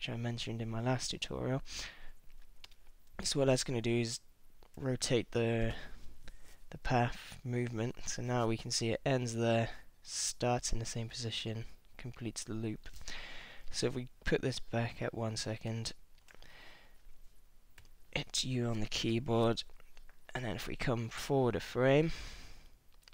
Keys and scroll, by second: 17.8 u, 21.3 super+Left.